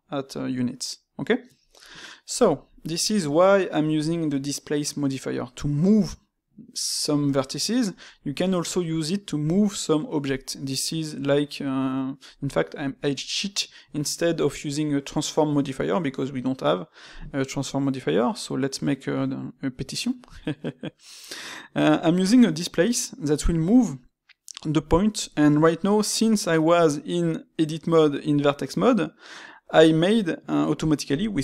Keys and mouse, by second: 2.0-5.6 middle drag.